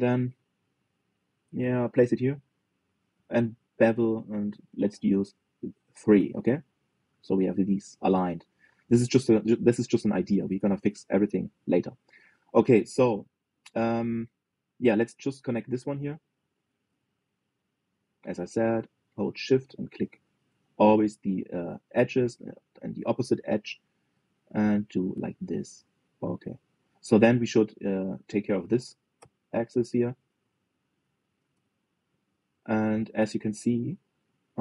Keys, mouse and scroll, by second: 3.9 ctrl+b, 7.4-10.3 middle drag, 10.3 scroll down 2, 10.5 middle click, 11.1 click, 11.4-11.8 scroll up 2, 11.8-16.2 shift+middle drag, 16.2 click, 17.1 shift+click, 17.6 f, 18.2 click, 18.8 shift+click, 19.5 f, 20.2 click, 20.7 shift+click, 21.2 f, 21.9 click, 22.6 shift+click, 23.2 f, 23.6 middle click, 24.5 click, 25.2 shift+click, 25.9 middle click, 26.1 f, 26.5-28.9 middle drag, 28.9 click, 29.4 shift+click, 29.9 f, 30.4 click, 30.8 shift+click, 31.1 f, 31.5 click, 31.9 shift+click, 32.3 f, 32.8-34.6 middle drag.